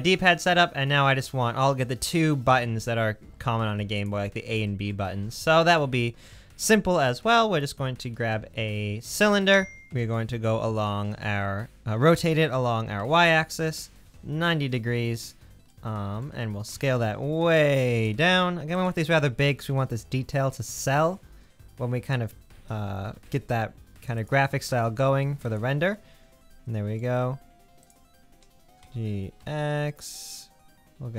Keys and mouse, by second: 5.2 shift+a, 9.9 r, 16.7 s, 18.8 middle click, 19.7 g, 22.6 g, 24.7 s, 28.8 g.